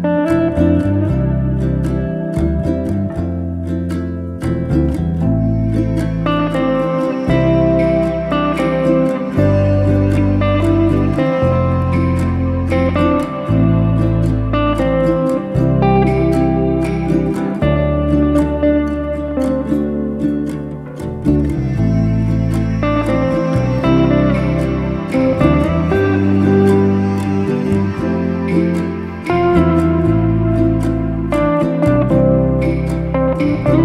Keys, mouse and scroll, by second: 0.1 shift+middle click, 0.8-2.0 shift+drag, 2.0-2.7 scroll down 1, 2.7 click, 3.5 shift+click, 3.9 shift+click, 4.5 ctrl+l, 5.3 click, 6.2 drag, 6.5 shift+click, 7.6 ctrl+l, 8.4 drag, 8.6 scroll down 1, 8.9-11.4 middle drag, 11.4 KP_7, 12.1-12.5 scroll up 1, 12.5 alt+z, 12.8-13.1 scroll up 2, 13.1-14.6 shift+middle drag, 15.1 shift+a, 17.5-18.3 scroll up 1, 18.3-18.7 scroll down 5, 19.2 click, 19.9 g, 20.9 1, 21.1 click, 22.0 g, 23.2-23.6 scroll up 5, 23.6 shift+middle click, 24.6 click, 25.3 g, 26.1 e, 27.2 e, 27.8 e, 28.5 e, 29.5 shift+click, 30.2 f, 31.1 click, 32.2-32.8 ctrl+right drag, 32.8 ctrl+z, 33.1 click.